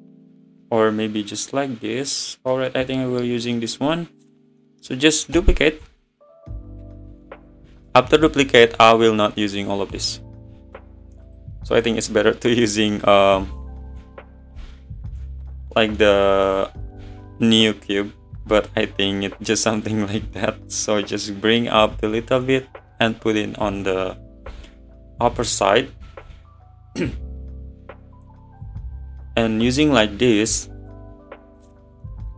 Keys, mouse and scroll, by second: 0.4 click, 0.6-5.4 middle drag, 5.4 shift+d, 8.3-8.7 drag, 8.7 scroll up 1, 9.9 click, 10.5 scroll up 1, 11.3-12.5 drag, 12.5-14.6 middle drag, 14.6 shift+s, 15.8-16.3 middle drag, 16.3 `, 17.0 s, 20.2 `, 21.2 click, 23.1 `, 24.4 s.